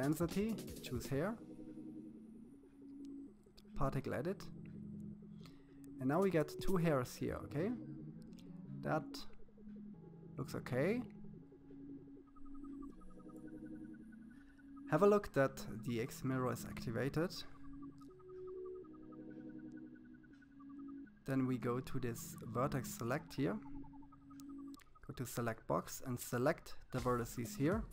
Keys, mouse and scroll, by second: 1.9-3.9 drag, 5.7-7.2 middle drag, 12.8-14.5 middle drag, 14.5-16.0 drag, 18.0 click, 21.8 click, 23.4-26.2 drag, 27.0 x.